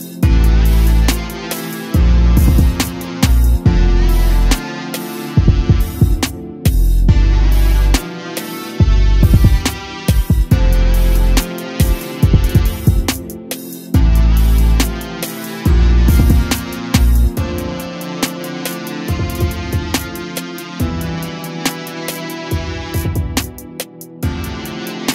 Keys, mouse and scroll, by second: 0.2 a, 0.4 a, 1.1-1.5 scroll down 3, 3.1 a, 3.3 a, 10.7 click, 12.2-12.9 scroll up 2, 12.9 g, 14.9 click, 15.7-16.8 drag, 16.8 KP_0, 18.6 g, 21.9 click.